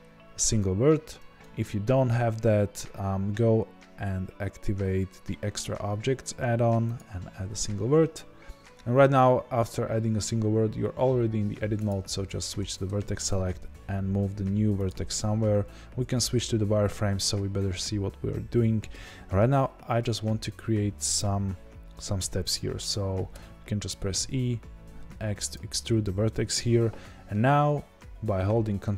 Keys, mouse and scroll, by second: 11.7-13.2 drag, 13.2 g, 14.8 click, 16.0 z.